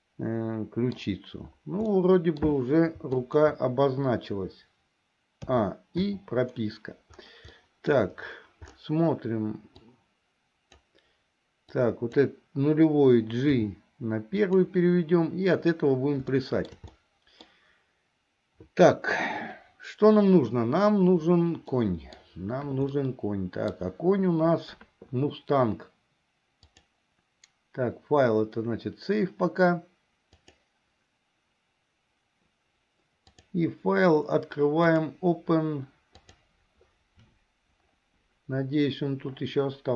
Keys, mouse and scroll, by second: 2.0 middle click, 3.2 shift+click, 5.6 a, 6.3 i, 7.7 middle click, 10.0-11.0 drag, 11.7 click, 13.7 g, 16.5 shift+middle click, 17.1 middle click, 21.8 middle click, 23.1 middle click, 26.7-31.7 drag, 33.3-36.7 drag.